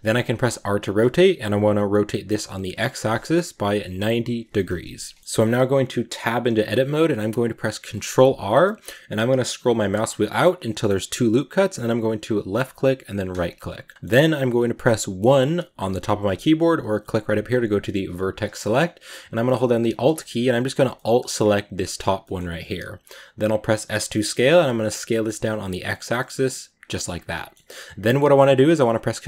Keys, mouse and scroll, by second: 0.2 scroll up 2, 0.5 r, 5.0 KP_Decimal, 5.2-5.9 middle drag, 5.9 Tab, 7.9 ctrl+r, 13.9-15.1 middle drag, 15.1 1, 16.7-19.8 drag, 19.8-20.8 alt+right drag, 20.8-23.7 middle drag, 23.7 s, 27.0 scroll down 1, 27.2-28.5 middle drag, 28.5 ctrl+r.